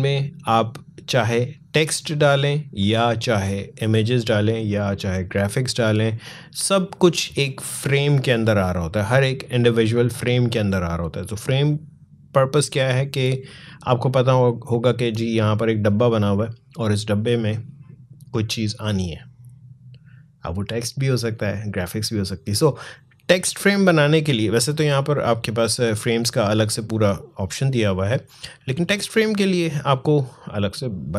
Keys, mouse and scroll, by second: 25.8-31.0 drag.